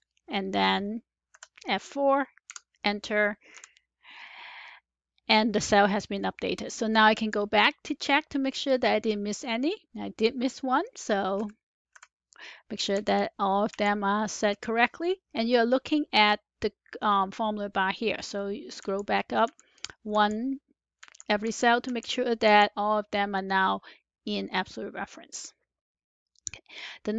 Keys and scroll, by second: 1.2 F4, 2.3 Return, 11.3 Up, 11.3 F2, 11.9 F4, 12.8 Return, 19.4 Up, 21.3 Up.